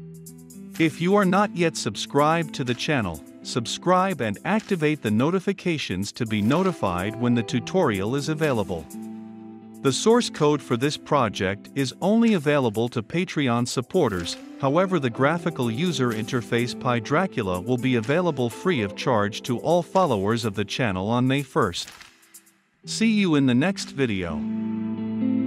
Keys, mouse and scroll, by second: 1.1 Return, 1.5 ctrl+F5, 2.8-9.3 drag, 9.4-13.2 drag, 13.5 ctrl+F5, 14.9 click, 15.0-25.2 drag.